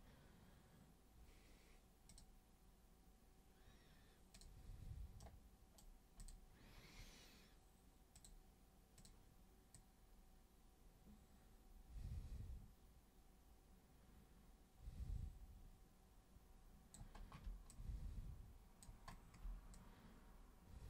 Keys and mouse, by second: 2.1 super+click, 4.3 super+click, 5.2 super+right click, 6.2 super+click, 8.1 super+click, 8.9 super+click, 9.7-16.9 super+drag, 17.7-18.8 alt+super+drag, 19.7-20.8 super+drag.